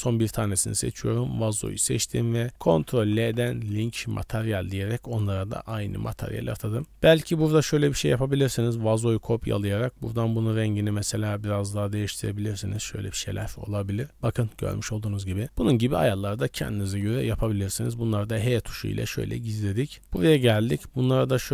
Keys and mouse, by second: 3.0 ctrl+l, 5.2 click, 6.1 click, 6.8-8.8 drag, 13.4 middle drag, 14.1-14.5 middle drag, 14.1 KP_Decimal, 15.2 middle click, 17.1 b, 17.9 h, 18.5 shift+middle drag, 19.4 shift+middle click, 20.0 middle click, 20.6 middle click.